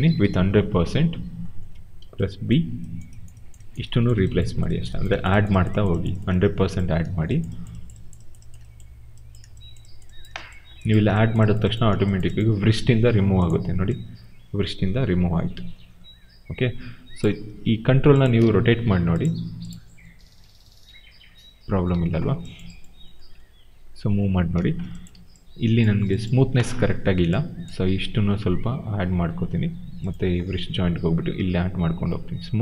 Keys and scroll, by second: 1.9 b, 21.9 ctrl+z, 24.4 ctrl+z, 25.0 q.